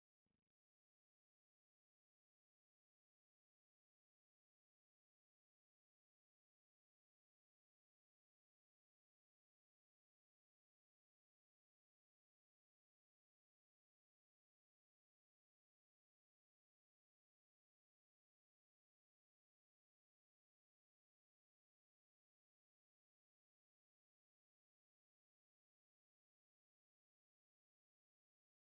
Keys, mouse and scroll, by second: 3.0-4.6 drag, 4.8-9.1 middle drag, 9.1-10.5 shift+drag, 10.7-17.0 drag, 18.0 middle click, 18.7 Tab, 25.9-28.7 shift+drag.